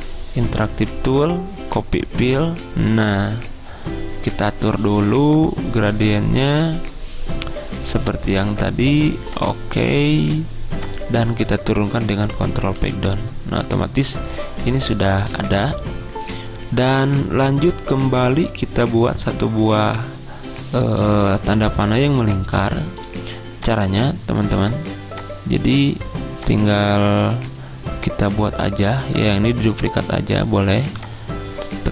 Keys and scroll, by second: 12.2 ctrl+Page_Down, 12.4 ctrl+Page_Down, 12.9 ctrl+Page_Down.